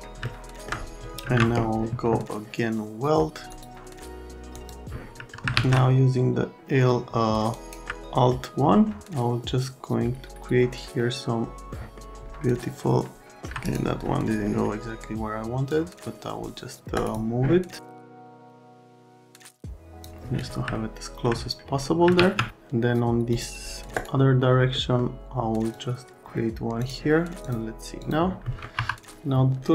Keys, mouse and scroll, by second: 0.2 alt+middle click, 1.2 ctrl+a, 3.5 click, 4.5 click, 5.3 alt+middle click, 5.5 alt+1, 7.0 alt+middle click, 7.5 alt+right click, 7.9 middle click, 11.7 middle click, 13.1 alt+middle click, 13.7 right click, 14.4 middle click, 15.7 click, 16.9 right click, 18.1 click, 18.7 right click, 18.8 click, 19.3 click, 20.7 alt+right click, 22.2 alt+1, 23.3 middle click, 24.7 right click, 25.7 middle click, 26.8 middle click, 27.4 middle click, 28.0 middle click, 28.4 right click, 28.7 F3.